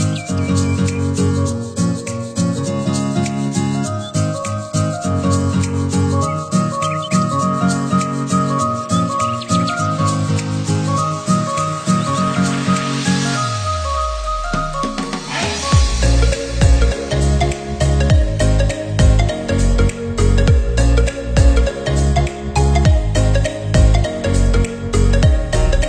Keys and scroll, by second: 2.6 ctrl+c, 2.9 ctrl+v, 20.0 ctrl+=.